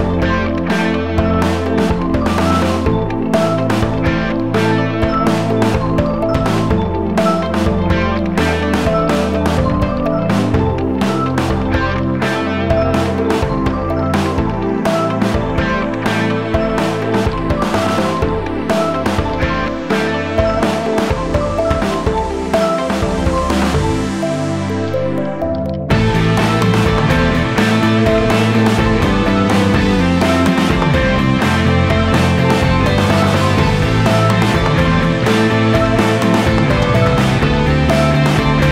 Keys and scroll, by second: 2.5 space, 3.5 ctrl+z, 4.3 t, 4.5 BackSpace, 8.3-9.7 typing, 11.1 Down, 11.4 ctrl+space, 11.6-13.6 typing, 12.6 ctrl+g, 23.9 Escape, 27.6 v, 28.7 ctrl+z.